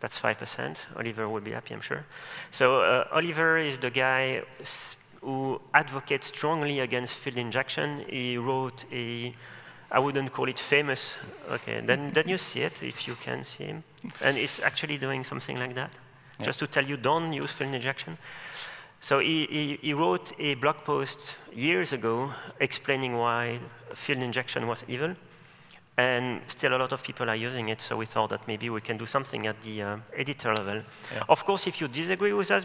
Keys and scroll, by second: 16.5 ctrl+shift+super+a, 26.1 ctrl+shift+super+a, 26.8 ctrl+shift+super+a.